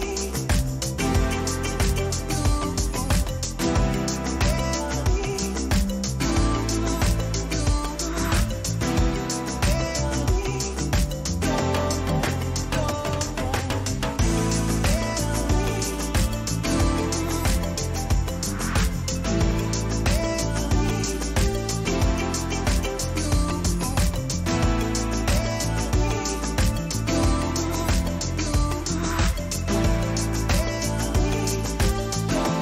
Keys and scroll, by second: 5.4 ctrl+-, 7.6 ctrl+-, 22.2 Return, 29.2 ctrl+t.